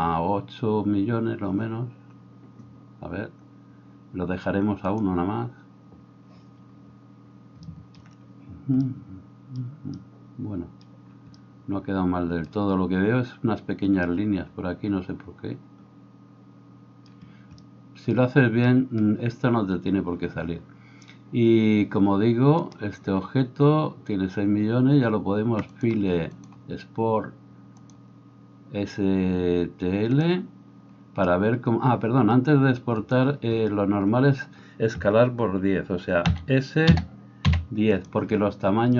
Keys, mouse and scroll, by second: 22.7 right click, 25.9 middle click, 26.5-38.2 drag, 36.3 s, 38.2-38.9 middle drag.